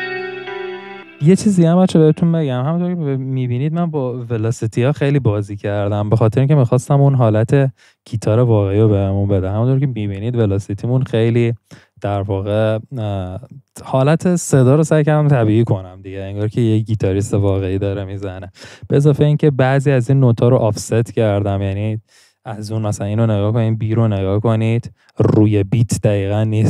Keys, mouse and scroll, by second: 0.1 •.